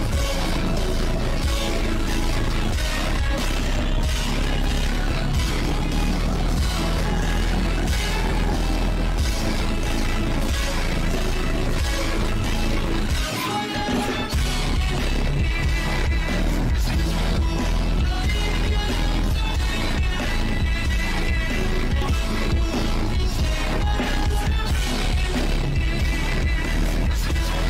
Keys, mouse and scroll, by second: 0.4 click, 0.5 click, 0.7 click, 1.1 click, 1.6 click, 2.7 scroll down 1, 2.9 click, 4.0 scroll up 1, 4.7 click, 4.8 scroll up 1, 5.0 click, 5.2 shift+`, 6.6 click, 6.9 shift+click, 7.3 click, 8.0 shift+click, 8.4 click, 9.2 ctrl+z, 9.3 shift+`, 10.4 click, 11.6 ctrl+z, 12.1 click, 12.3 click, 12.8 shift+click, 13.1 shift+click, 13.3 shift+click, 13.5 shift+click, 13.7 shift+click, 14.2 click, 14.7 ctrl+z, 14.8 click, 15.1 ctrl+z, 15.5 click, 17.5 click, 17.7 shift+click, 17.9 shift+click, 18.3 click, 19.7 click, 19.9 click, 20.1 click, 20.2 click, 20.5 click, 20.7 click, 21.0 shift+`, 22.0 click, 22.6 click, 23.0 shift+`, 24.6 click, 25.0 shift+`, 25.9 ctrl+z, 26.2 click, 26.7 ctrl+z, 26.8 click.